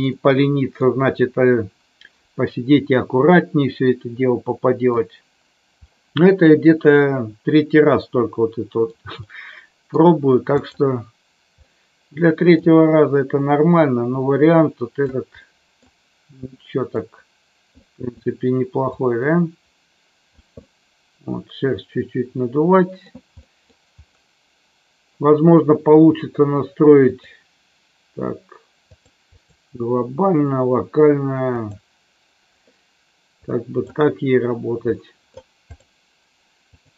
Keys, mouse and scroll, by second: 0.1-0.8 middle drag, 3.3-4.9 middle drag, 5.8-8.8 middle drag, 9.3-9.9 middle drag, 10.6 click, 11.7-12.7 middle drag, 13.8-15.0 drag, 15.4 middle click, 16.4 middle click, 17.8 middle click, 18.9-20.4 drag, 20.5-23.0 middle drag, 23.3-23.7 middle drag, 27.2-28.9 drag, 29.3-32.4 drag, 33.4 click, 35.0 middle drag, 36.6-36.9 drag.